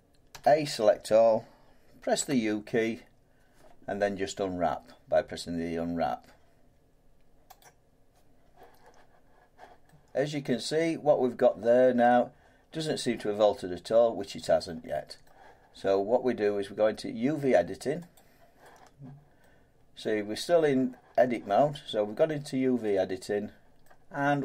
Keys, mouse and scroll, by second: 7.6 click, 10.2-12.7 drag, 15.2 middle click, 18.1 click, 20.0 middle click, 20.4-22.1 scroll down 1, 22.3-23.0 scroll down 4, 22.4 middle click, 22.4 middle click, 23.8 middle click, 24.0 scroll down 2.